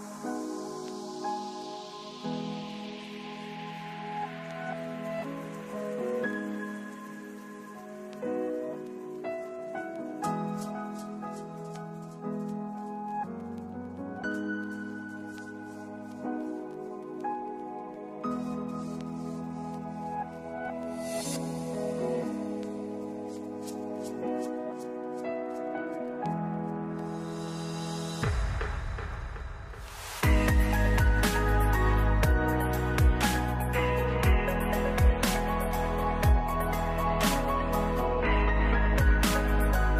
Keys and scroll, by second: 0.7 3, 16.8 f, 24.5 ctrl+s, 28.6 ctrl+space, 32.8 0, 34.2 ctrl+space, 37.7 ctrl+s.